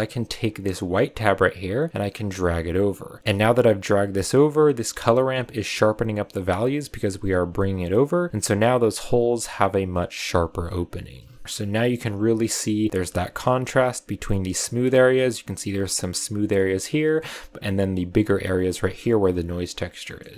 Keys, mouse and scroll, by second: 0.5-4.7 drag, 6.7-9.3 drag, 11.4-13.1 scroll up 3, 13.1-14.8 shift+middle drag, 14.8 scroll up 2, 15.5-16.8 scroll up 1, 16.8-19.8 shift+middle drag, 19.8 scroll down 1, 19.9 shift+middle drag, 20.2 scroll up 2.